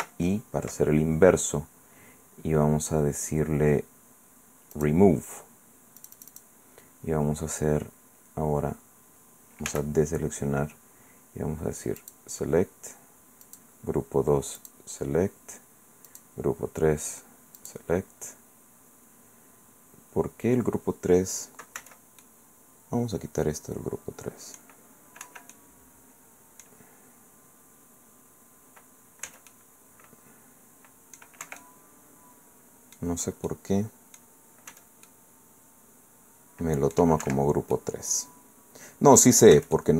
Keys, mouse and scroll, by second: 0.0 ctrl+i, 4.7 click, 6.0 click, 9.7 a, 12.0 click, 13.4 click, 14.6 click, 16.1 click, 17.6 click, 19.0-19.4 scroll down 2, 19.5-19.9 scroll up 2, 21.8 c, 22.2-24.8 drag, 25.2 Escape, 25.5-26.8 drag, 29.3 c, 29.5-31.4 drag, 31.4 Escape, 31.6-33.2 drag, 33.5 click, 34.7 c, 35.1-37.1 middle drag, 37.2 Escape, 37.7-39.4 middle drag, 39.5 c, 39.7 middle click.